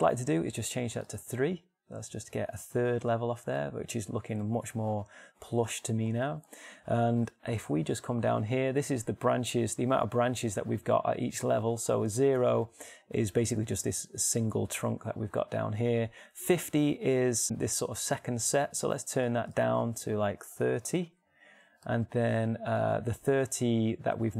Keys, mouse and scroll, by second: 19.9-22.5 drag.